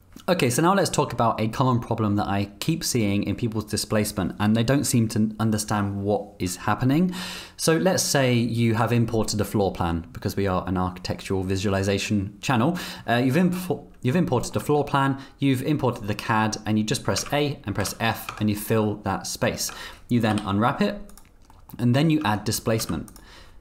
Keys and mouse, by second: 14.2 click, 14.6 Tab, 17.2 a, 17.8 f, 18.3 Tab, 19.6 Tab, 20.3 u, 21.5 click, 22.2 Tab, 22.8 z.